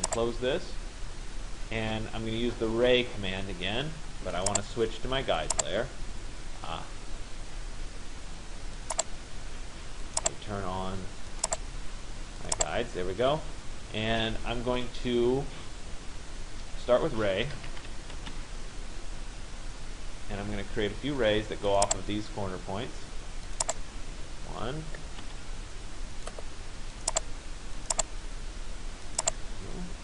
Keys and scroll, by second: 17.3 r, 18.3 Return, 24.7 Return, 29.8 Return.